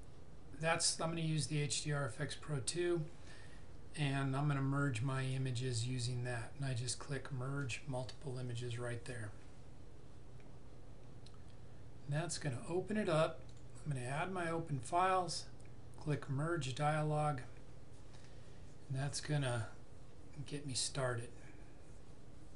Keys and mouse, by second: 5.2 click, 13.6 click, 16.2 click.